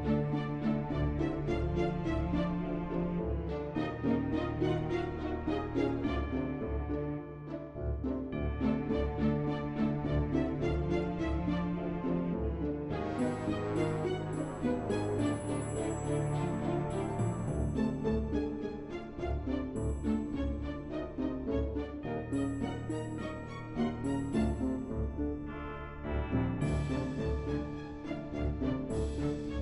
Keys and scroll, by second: 8.2-9.6 typing, 24.2-25.6 typing.